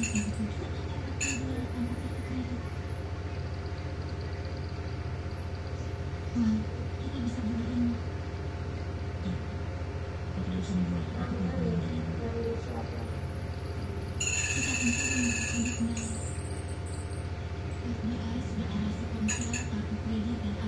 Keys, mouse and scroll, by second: 0.2 click, 2.6 click, 4.2 click, 9.2 click, 10.4-11.8 drag, 11.8 click, 13.5 click, 14.8 click, 16.7 click, 17.3 click, 20.0 click.